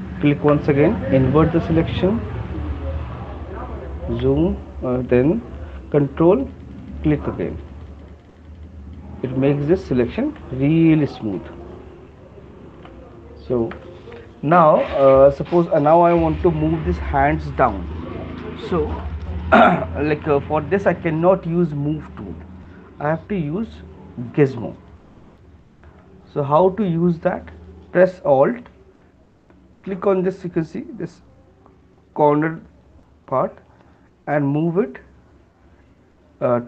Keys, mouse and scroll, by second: 0.2 ctrl+click, 2.8 alt+click, 4.4 click, 7.0 ctrl+click, 7.1 ctrl+click, 7.5-8.8 ctrl+click, 8.4 alt+click, 9.2 ctrl+click, 13.0 right click, 14.0 alt+click, 23.3-23.9 typing, 25.6 alt+click.